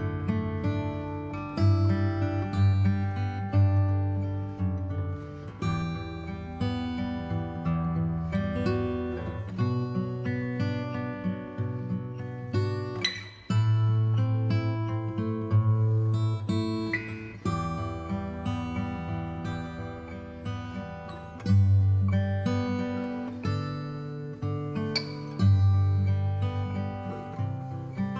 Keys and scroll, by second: 6.0 b, 6.7 alt+x, 9.8 x, 10.3 space, 10.8 v, 23.0 space.